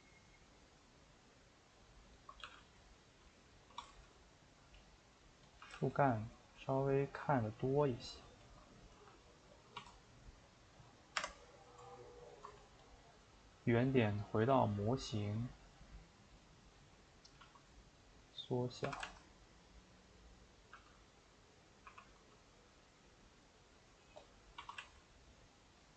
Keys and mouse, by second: 1.8 click, 2.2 shift+click, 2.4 g, 3.3 click, 3.7 s, 5.5 click, 5.6 g, 7.1-8.5 middle drag, 8.5 shift+click, 8.6 middle click, 9.0 g, 17.4 s, 18.8 r, 20.8 g, 21.9 r, 24.2 click, 24.6 s.